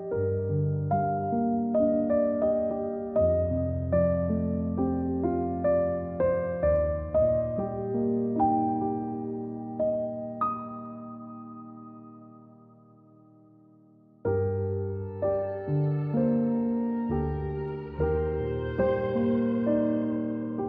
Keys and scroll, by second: 16.1 ctrl+z, 16.4-17.1 typing.